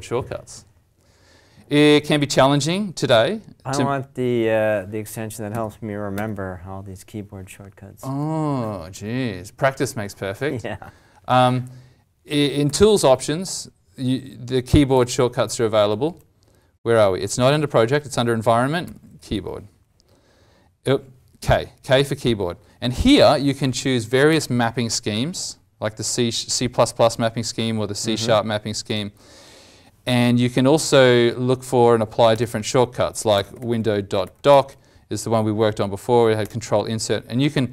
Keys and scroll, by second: 2.1 ctrl+Tab, 4.1 alt+Tab, 5.5 alt+t, 12.6 alt+t.